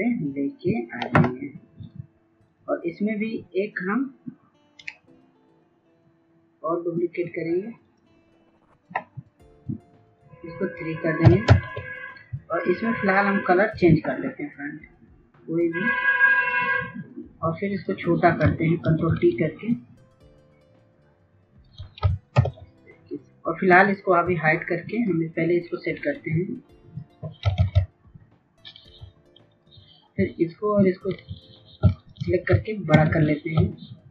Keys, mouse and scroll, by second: 4.6 right click, 7.5 click, 10.9 KP_3, 13.2-16.0 drag, 18.7 ctrl+t, 20.1 shift+click, 22.2 Return, 22.8-27.0 drag, 27.1 ctrl+z, 28.4 click, 30.0 ctrl+click, 31.5 ctrl+click, 32.5 ctrl+t, 34.0-34.1 shift+drag.